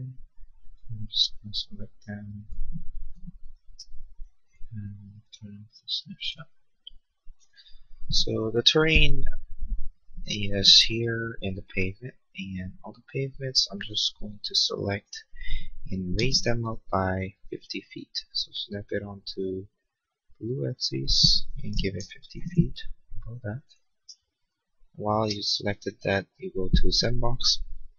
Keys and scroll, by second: 16.2 m, 21.7 5, 22.1 0, 22.5 Return, 25.3 space.